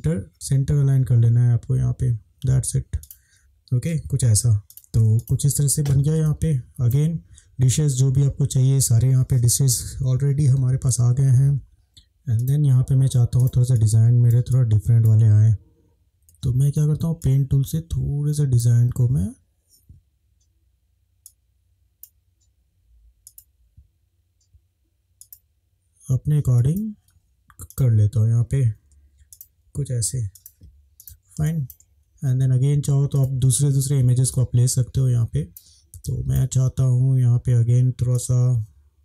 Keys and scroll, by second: 0.3 ctrl+z, 4.7 Down, 6.2 space, 16.0 ctrl+z, 16.3 ctrl+z, 30.3 |, 31.5 space, 34.3 space.